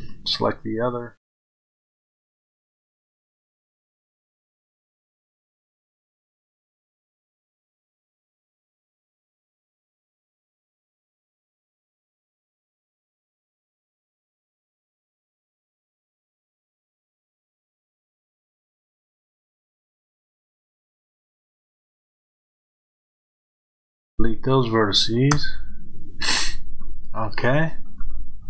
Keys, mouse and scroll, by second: 1.6 click, 4.2-11.8 drag, 9.4-10.0 scroll up 2, 10.0-11.8 scroll up 1, 11.8-20.3 middle drag, 17.5 KP_7, 20.3-28.4 drag, 23.9 Delete, 25.3 KP_Enter.